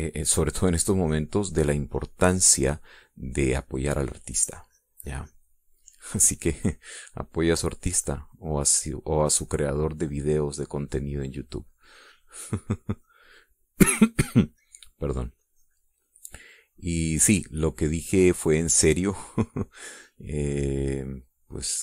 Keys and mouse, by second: 2.8 middle click, 3.7-6.6 drag, 6.6 middle click, 10.5-14.6 drag, 15.6-17.2 drag, 18.0 middle click.